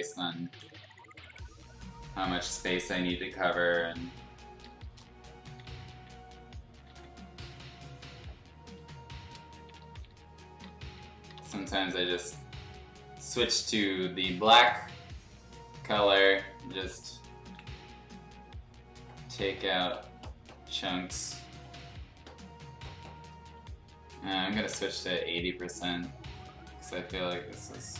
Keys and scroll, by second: 0.8 x, 2.5 x, 4.0 ctrl+z, 4.9 Return, 5.5 ], 5.6 ], 5.8 ], 5.9 ], 6.8 ctrl+z, 8.7 x, 9.5 ], 9.7 ], 9.8 ], 11.3 [, 11.4 [, 17.6 ctrl+z, 21.5 x, 24.7 8, 26.9 ctrl+z.